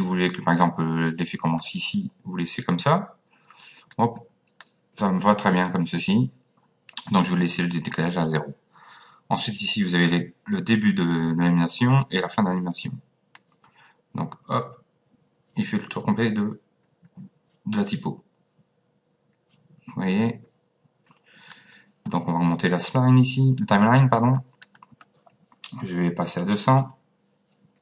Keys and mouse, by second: 3.9 click, 13.4 click, 24.3 click, 26.2 KP_2.